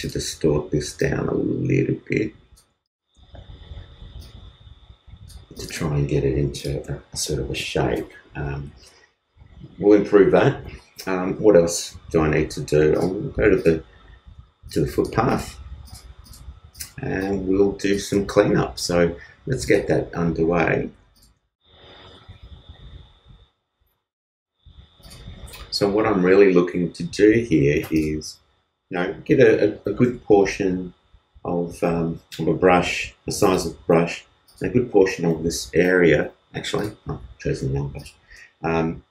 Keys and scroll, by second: 35.6 super+z.